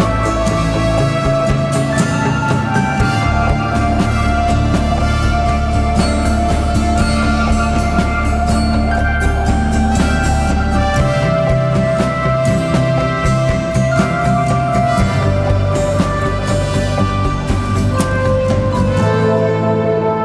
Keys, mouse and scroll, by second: 6.6 double click, 15.9-18.5 scroll up 1.